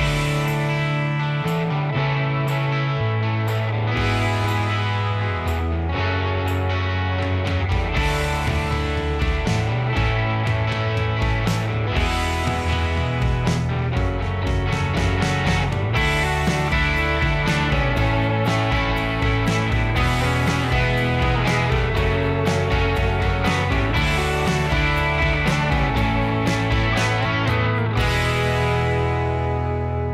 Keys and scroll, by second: 0.3 Escape, 4.2 Escape, 4.8 b, 5.5 Escape, 8.1 b, 8.6 Escape, 17.3 typing, 17.6 Return, 20.1 typing.